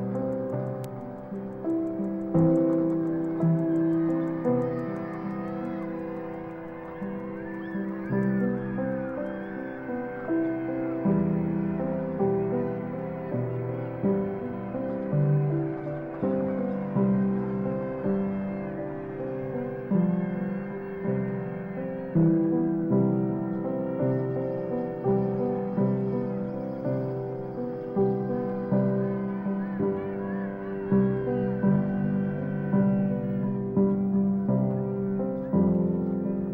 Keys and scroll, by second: 17.8 Left, 18.5 shift+Left, 18.7 shift+Right, 19.4 shift+Right, 20.3 shift+Right, 22.3-32.0 typing.